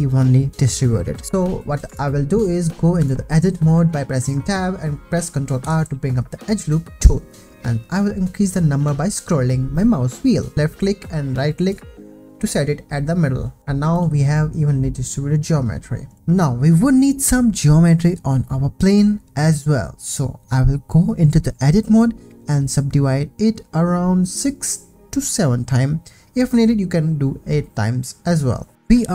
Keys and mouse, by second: 0.9 ctrl+r, 1.4 click, 1.9 Tab, 2.7 click, 3.0 Tab, 5.6 ctrl+r, 11.7 click, 13.6 Tab, 13.6 ctrl+s, 13.9 click, 16.2 click, 16.6 click, 17.0 click, 18.0 ctrl+z, 19.1 Tab, 19.5 Tab, 19.9 click, 20.7 click, 21.3 click, 22.4 click, 22.9 click, 23.5 click, 24.4 click, 27.4 Tab.